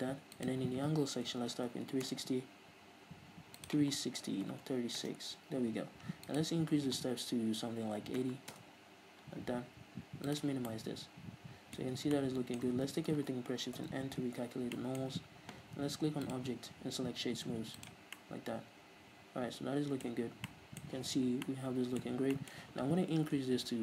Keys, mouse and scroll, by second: 0.4-10.8 drag, 2.2 Return, 5.2 Return, 8.7 Return, 10.8-16.4 middle drag, 12.1 Tab, 12.8 Tab, 12.9 a, 13.9 shift+n, 14.4 Tab, 16.4-18.2 drag, 18.2-23.8 middle drag, 20.2-20.6 scroll up 2, 21.4 scroll down 2, 22.3 scroll down 1, 23.1 scroll down 1.